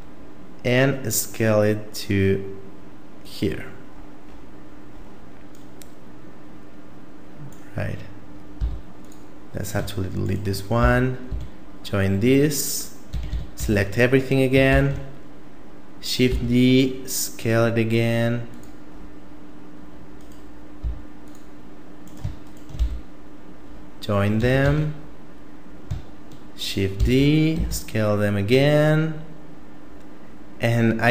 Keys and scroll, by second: 8.6 x, 10.8 f, 11.3 a, 13.1 a, 13.3 a, 13.6 a, 14.7 shift+d, 20.8 x, 22.8 f, 24.4 a, 24.6 a, 27.0 shift+d.